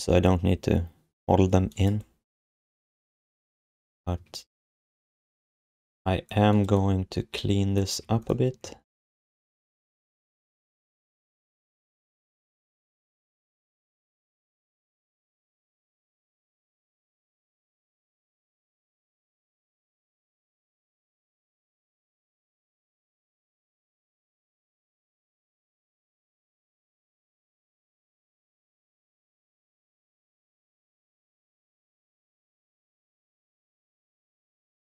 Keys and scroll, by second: 4.1 q, 7.9 q, 8.6 Tab, 10.4 BackSpace, 11.2 BackSpace, 12.0 BackSpace, 12.5 BackSpace, 19.3 BackSpace, 20.0 BackSpace, 28.8 q, 34.7 alt+shift+d.